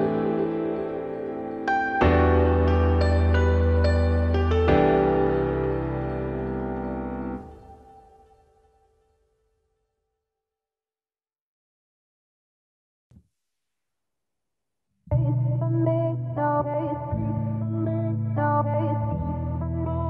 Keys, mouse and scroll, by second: 0.5 i, 2.2 middle click, 2.6 e, 4.4 i, 7.1 i, 8.5 e, 9.5 scroll down 1, 9.6 middle click, 9.9-10.3 scroll up 2, 10.3 scroll down 1, 10.3 middle click, 11.1 `, 12.4 ctrl+b, 17.2 z, 17.7 g, 18.4 z, 18.5 scroll down 4, 18.7 middle click, 19.3 Tab, 19.6-20.0 right drag.